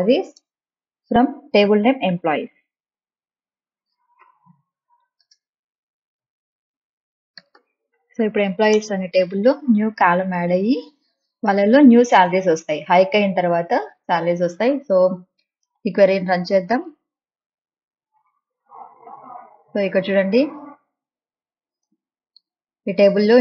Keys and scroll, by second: 0.3 Return, 4.1 Return, 4.3-8.0 typing, 8.7 Return.